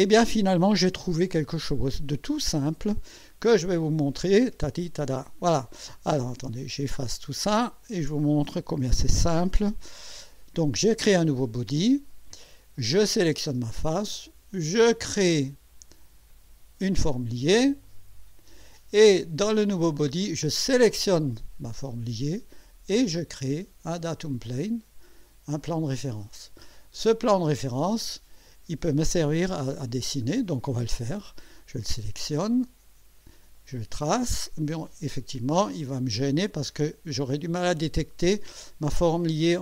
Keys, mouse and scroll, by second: 0.3-1.5 drag, 3.1 scroll down 1, 7.1 click, 7.8 ctrl+click, 9.1 Delete, 11.9-12.7 drag, 13.1 click, 16.3 click, 17.8 click, 20.5 click, 24.1 click, 25.6 click, 27.6-28.3 drag, 30.0 scroll down 1, 31.8 click, 33.5 click, 39.1 click.